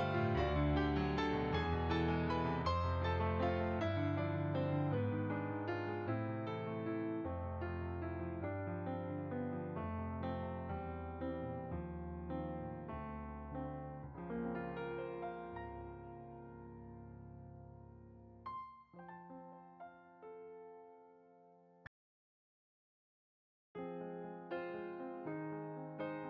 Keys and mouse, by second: 1.5 click, 1.7 Tab, 2.6 click, 7.3 z, 8.4 click, 8.8 middle click, 12.2 Tab, 13.0 click, 13.6 shift+a, 16.3 click, 17.7 s, 18.2 click, 18.8 g, 19.2 z, 20.2 click, 21.9 s, 22.2 z, 22.9 click, 23.6 g, 23.9 z, 24.6 click, 25.4 y.